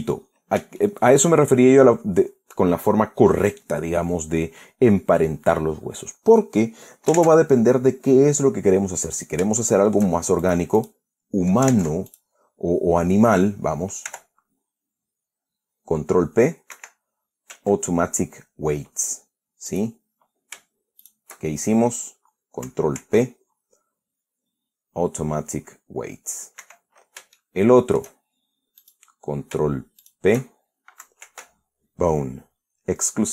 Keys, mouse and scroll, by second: 0.1 Escape, 0.8-1.1 scroll down 2, 1.4-2.0 shift+drag, 7.8 ctrl+Tab, 9.7-10.1 scroll up 2, 10.2-10.8 shift+drag, 11.1 shift+click, 11.4 shift+click, 12.3 ctrl+Tab, 12.7 ctrl+click, 13.0 ctrl+right click, 14.7 r, 17.4 Escape, 20.3 right click, 21.7 shift+right click, 23.6 ctrl+p, 27.3 Escape, 28.0-28.8 shift+middle drag, 29.5 right click, 30.7 shift+right click, 31.9 ctrl+p.